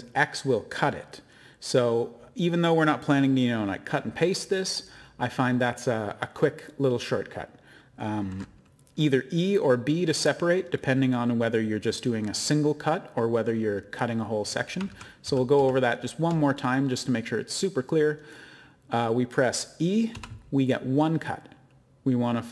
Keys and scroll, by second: 14.9 ctrl+z, 15.2 ctrl+z, 15.6 ctrl+z, 20.1 e.